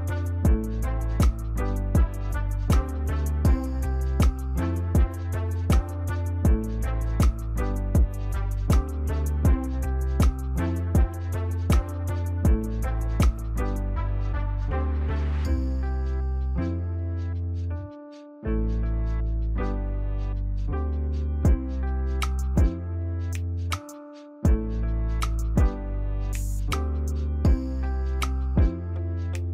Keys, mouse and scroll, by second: 0.5 ctrl+s, 4.5 right click, 17.8 right click, 21.3 Delete, 23.1 double click, 25.0 c, 27.0 ctrl+s.